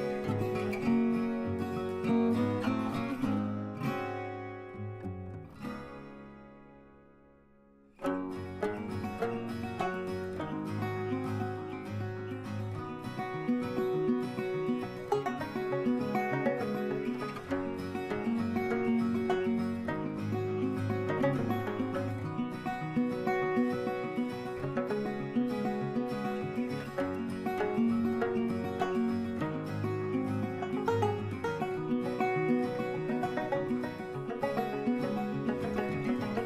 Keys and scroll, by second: 17.3 ctrl+g.